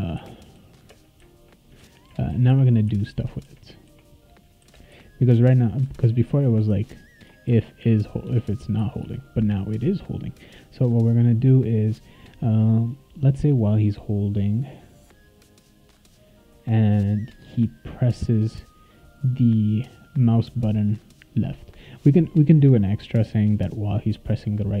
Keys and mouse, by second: 7.4 shift+1, 8.2 BackSpace.